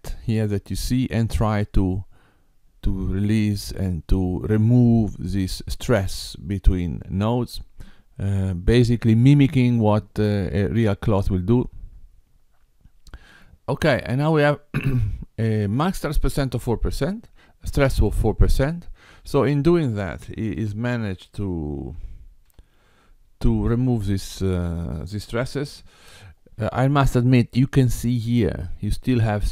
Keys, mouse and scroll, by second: 18.3 click, 20.3 Tab, 22.0 Tab, 22.5 g, 25.9 Tab.